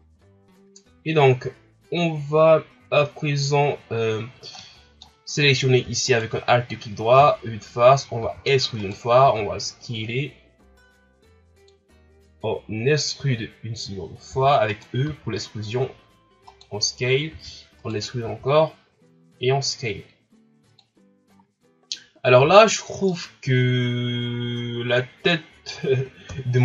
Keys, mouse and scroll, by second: 4.6-6.1 middle drag, 6.1 alt+right click, 7.2 KP_1, 8.2 e, 9.2 s, 14.3 e, 15.0 s, 17.3 e, 20.9 scroll down 1, 21.6-22.7 scroll up 3, 22.7 scroll up 1, 23.0-26.2 middle drag, 26.3 KP_3.